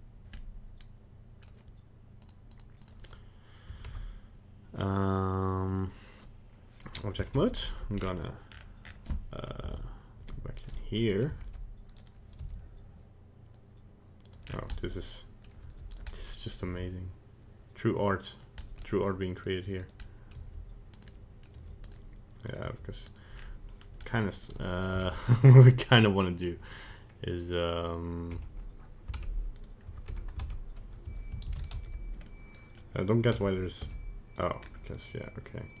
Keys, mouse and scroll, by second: 0.4 middle click, 2.2 click, 3.8 ctrl+Tab, 7.3 alt+h, 7.9-8.8 scroll down 8, 8.8-9.6 scroll up 5, 9.6 KP_Divide, 10.7 right click, 11.0 middle click, 11.4 ctrl+Tab, 11.9 right click, 12.4 g, 14.5 scroll down 4, 14.7 middle click, 15.7 g, 16.0 middle click, 16.4 middle click, 16.6 g, 18.6 middle click, 19.4 right click, 19.8 right click, 20.1 middle click, 20.4 g, 21.1 middle click, 21.7 g, 22.5 right click, 22.7 g, 23.4 scroll up 2, 23.8 scroll down 1, 24.1 middle click, 24.5 right click, 25.0 ctrl+Tab, 25.4 right click, 27.6 right click, 28.4 Tab, 29.2 ctrl+Tab, 30.2 Tab, 31.1 a, 31.6 alt+r, 31.7 alt+g, 31.8 alt+s, 32.3 middle click, 33.4 Tab, 33.9 Tab, 34.4 right click, 34.6-35.8 scroll up 2, 34.9 right click.